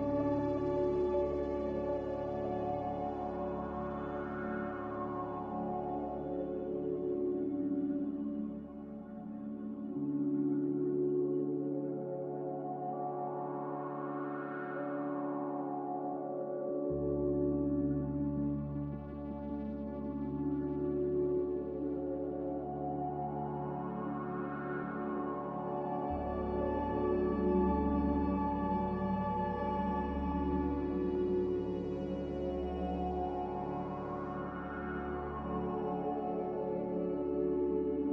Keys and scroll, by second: 3.6 Return, 8.4 ctrl+z, 28.2-29.3 typing, 32.3-33.0 typing.